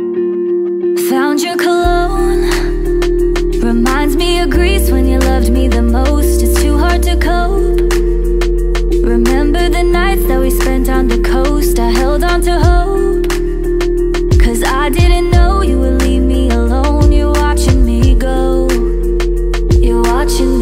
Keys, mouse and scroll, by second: 3.5 2, 4.9 Return, 8.1 double click, 12.5 right click, 16.7 double click, 19.7 ctrl+d.